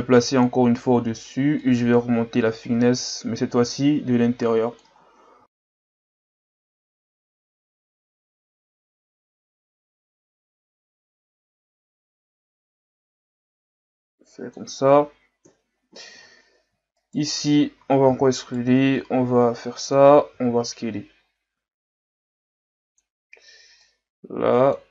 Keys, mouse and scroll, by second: 0.0 click, 1.5 click, 6.8 KP_3, 7.8-8.7 shift+scroll up 4, 9.1 click, 10.1-11.8 middle drag, 11.8 click, 15.4 KP_3, 16.2 Tab, 17.0 alt+right click, 18.1 e, 19.0 click, 20.4 s, 23.8 click.